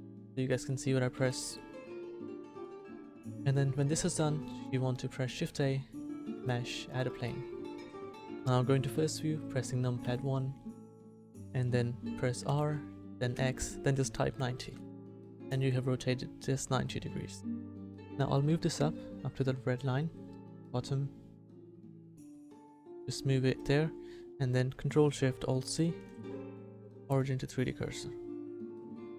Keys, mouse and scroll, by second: 1.1 n, 5.3 shift+a, 10.0 KP_1, 12.5 r, 16.9-20.5 middle drag.